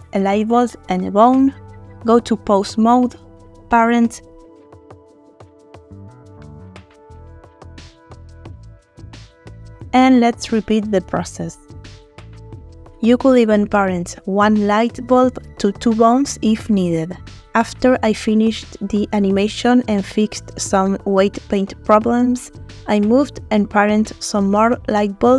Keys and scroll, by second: 4.2 ctrl+p, 7.2 r, 8.7 Escape, 16.1 ctrl+p, 17.8 r, 18.9 Escape, 20.0 r, 22.4 Escape, 23.0 ctrl+Escape, 25.1 ctrl+p.